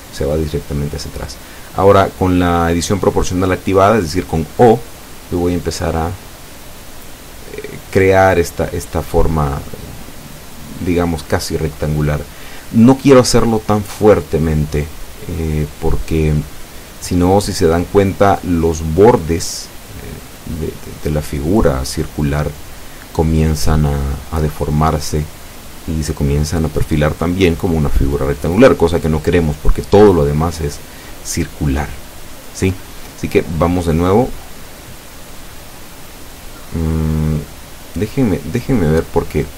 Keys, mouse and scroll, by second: 0.1 shift+right click, 11.0 s, 12.1 x, 13.9-14.5 scroll down 4, 15.0-15.4 scroll down 1, 15.7-16.1 scroll down 1, 16.6-17.0 scroll down 1, 17.2 scroll down 1, 20.7 Escape.